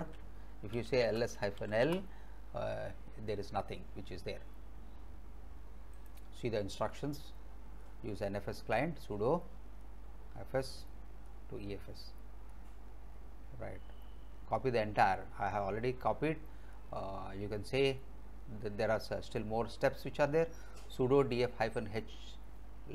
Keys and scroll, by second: 0.5-2.1 typing.